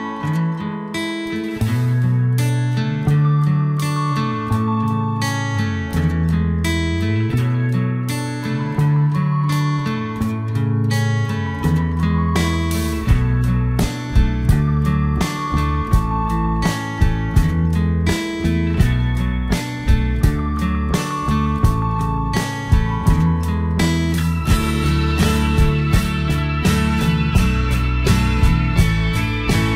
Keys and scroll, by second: 22.7 ctrl+a.